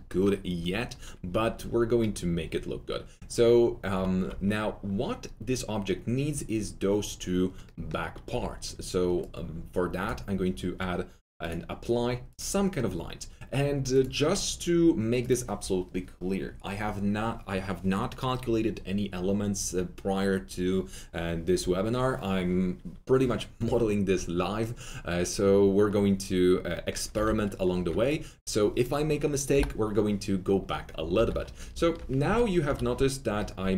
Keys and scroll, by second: 8.3 2, 27.1 alt+4, 27.7 F3, 29.5 Delete, 31.1 alt+w, 32.2 alt+F3.